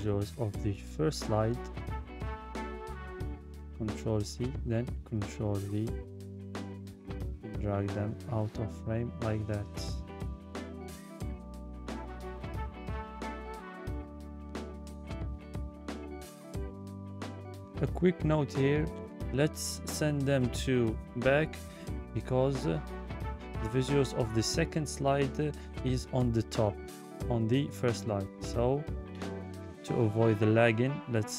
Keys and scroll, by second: 1.3 ctrl+c, 3.6 ctrl+v.